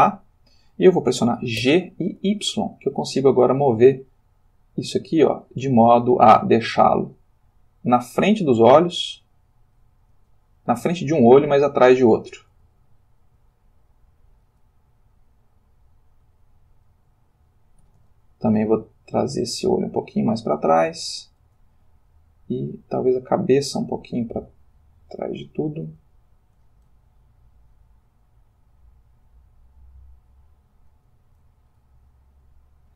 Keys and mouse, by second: 1.7 g, 2.2 y, 10.2 space, 11.1 click, 12.6 Tab, 13.6 shift+click, 14.3 shift+middle click, 15.4 click, 16.3 middle click, 17.8 g, 18.0 y, 21.5 shift+space, 22.4-22.9 drag, 24.2 click, 26.0 g, 26.5 y, 31.0 shift+space, 31.7-32.9 shift+middle drag.